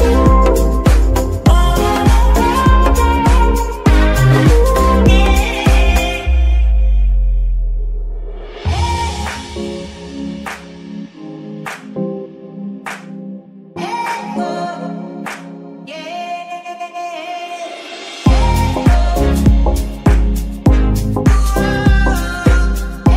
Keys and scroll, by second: 0.5 g, 2.1 g, 2.2 y, 2.3 y, 2.7 Escape, 5.5 s, 8.3 z, 9.1 KP_3, 9.6 g, 11.0 shift+s, 11.7 g, 12.5 s, 12.8 g, 19.5 shift+d, 20.1 Escape, 20.9 g, 23.0 r.